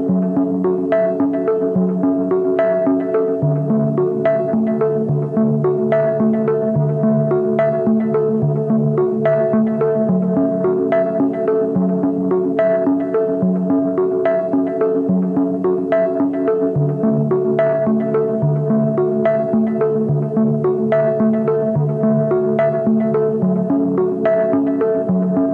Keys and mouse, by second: 12.1 shift+middle click, 13.8 shift+middle drag, 14.1 click, 21.2 a, 21.6 a, 22.2 shift+middle click, 24.7 middle click.